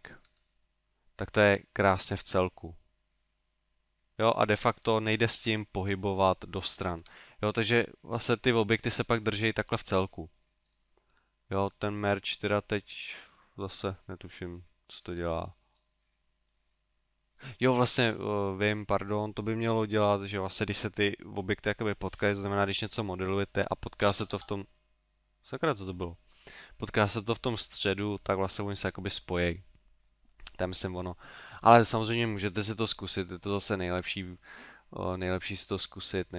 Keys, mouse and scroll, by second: 0.3 g, 4.5 click, 4.8 middle click, 5.5 g, 6.7 click, 7.0 g, 7.9 click, 8.3 middle click, 8.9 g, 9.8 click, 10.2 middle click, 11.6 click, 12.1 g, 13.5 click, 13.8 middle click, 15.2 g, 15.8 click, 16.5 middle click, 18.1 click, 33.7 middle click, 34.6 middle click.